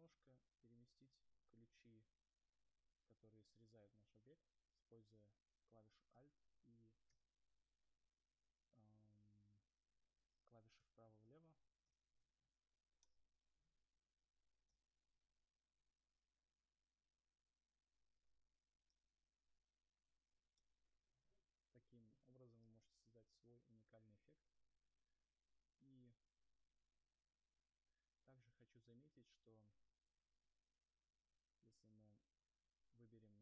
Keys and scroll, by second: 10.3 alt+Right, 14.0 alt+Right, 14.2 alt+Left, 14.4 alt+Right, 14.6 alt+Left, 14.8 alt+Right, 17.9 0, 22.1 0.